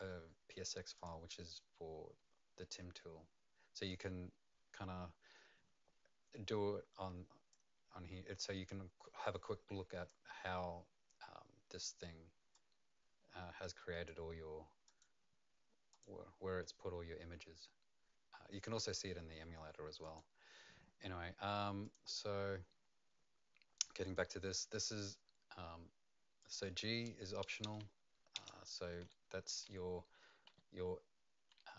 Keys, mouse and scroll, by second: 3.9 click, 7.5 click, 7.5-9.2 scroll down 4, 9.2 click, 12.5 click, 15.9 click, 20.0 click, 21.8 click, 26.4 click, 28.3 BackSpace, 29.0 Right, 29.6 Right, 30.5 Right, 31.6 Left.